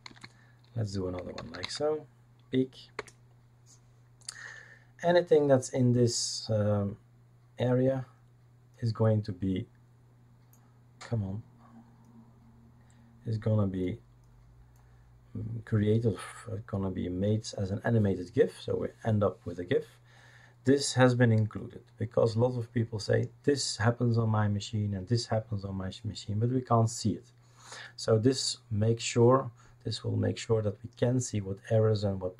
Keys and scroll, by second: 0.1 ctrl+space, 0.9-2.1 typing, 3.0 Return.